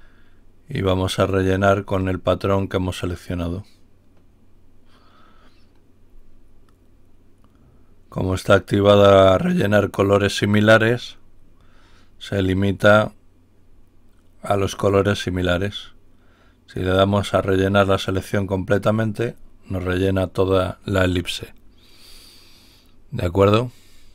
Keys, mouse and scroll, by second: 1.2 click, 3.2 click, 16.7 click, 18.6 click.